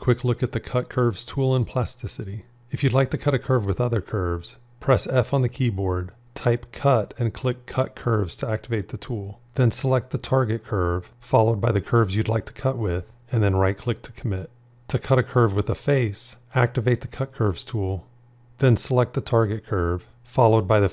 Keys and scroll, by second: 5.2 f.